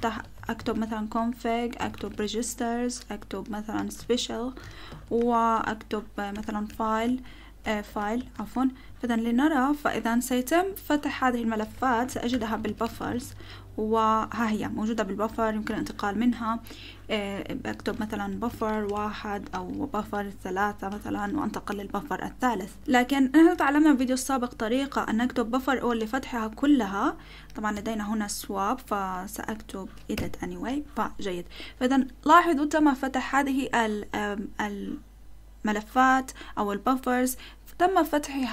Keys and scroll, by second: 0.0-8.2 typing, 8.0 Tab, 8.3 Tab, 8.8 Return, 11.5-13.5 typing, 15.3-15.6 typing, 17.5-20.9 typing, 23.8 typing, 25.0-26.2 typing, 30.1 e.